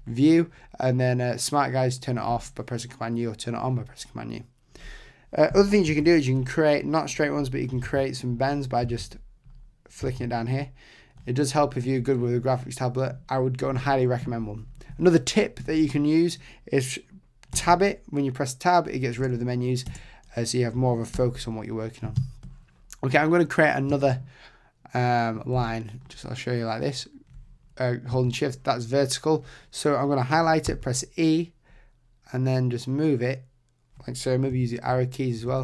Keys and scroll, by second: 5.9 shift+b, 7.8 super+z, 17.5 Tab, 21.1 super+=, 34.5 Left.